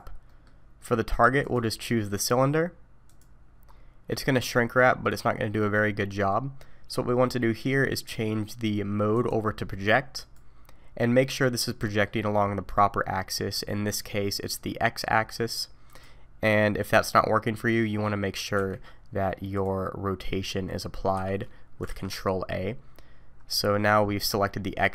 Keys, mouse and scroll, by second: 0.3 middle click, 1.4 click, 3.7-4.3 scroll up 3, 4.1 middle click, 6.1 middle click, 11.5 click, 11.5-12.2 scroll down 3, 11.8 middle click, 13.4 middle click, 15.9 click, 18.6 n, 19.5 click, 21.2 n, 21.9 ctrl+a, 23.4-24.1 scroll up 1.